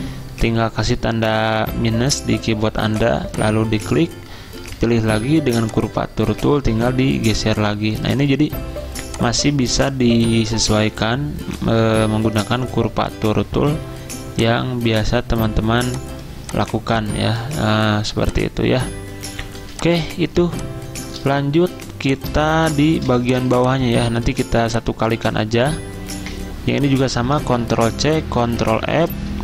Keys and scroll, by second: 0.3 -, 4.8 ~, 19.6 z, 21.6 v, 23.2 z, 24.2 v, 26.0-26.7 typing, 27.6 ctrl+c, 28.4 ctrl+f.